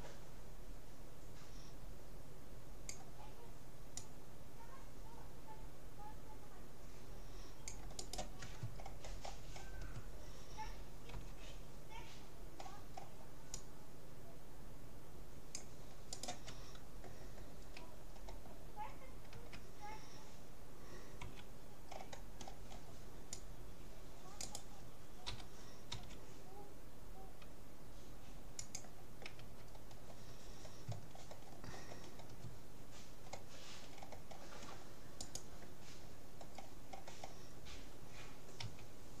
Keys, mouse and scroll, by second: 8.8-11.4 middle drag, 11.2 c, 16.2-17.8 right drag, 17.8-19.4 middle drag, 19.4 a, 21.2 c, 24.6-26.4 right drag, 25.4 g, 29.4 a, 29.7-31.2 middle drag, 34.4 middle click, 35.2-37.0 right drag, 38.6 a.